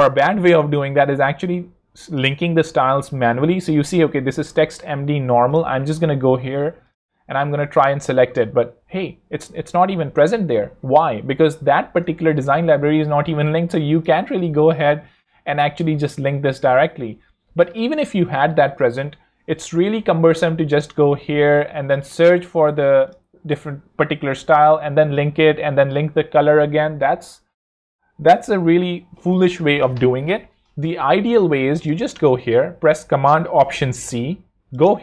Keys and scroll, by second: 11.8 ⟲, 21.1 super+Escape, 25.0 Escape, 33.7 alt+super+c.